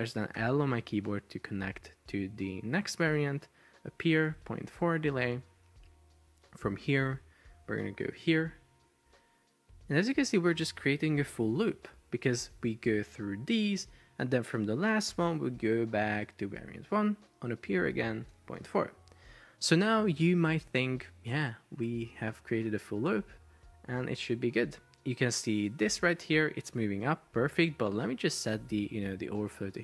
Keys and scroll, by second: 0.4 l, 3.9-5.3 typing, 8.1 l, 10.6-12.0 typing, 15.2 l, 17.8-19.2 typing, 26.2 Escape.